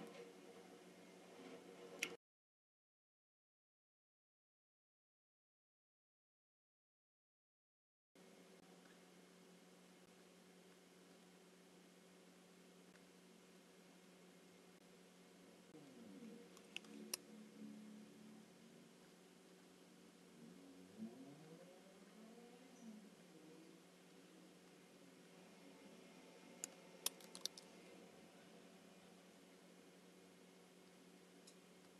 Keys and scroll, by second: 2.1 space, 16.8 space, 26.7 space, 27.4 shift+m.